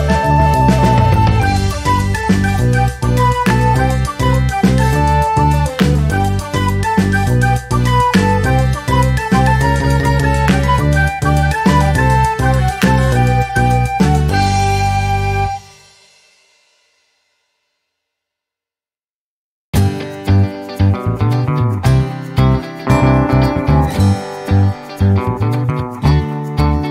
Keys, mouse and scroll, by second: 0.4 ctrl+shift+click, 0.8 ctrl+shift+click, 1.3 ctrl+shift+click, 2.1 g, 4.1 click, 5.1-6.1 drag, 6.7 click, 7.7-10.7 drag, 12.4 ctrl+d, 13.1 ctrl+click, 13.8 click, 14.3-15.5 drag, 15.8 click, 16.7 click, 17.4 click, 18.6 click, 19.6-20.9 drag, 21.5 click, 22.9 click, 23.6 ctrl+scroll up 2, 24.1-26.9 ctrl+drag.